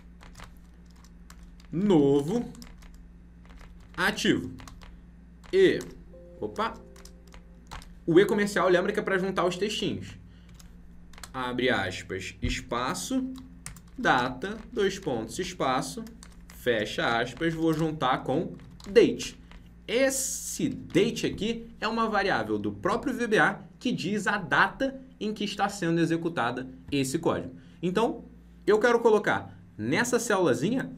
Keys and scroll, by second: 20.8 ctrl+shift+Left.